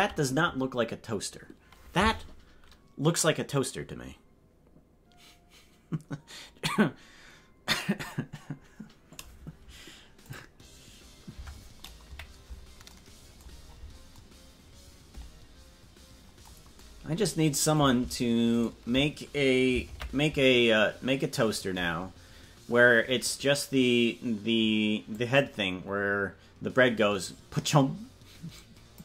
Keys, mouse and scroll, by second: 12.0 KP_Decimal, 13.5 scroll down 5, 14.1 scroll down 4, 18.5 shift+right click, 19.8 ctrl+l, 25.1-28.9 drag.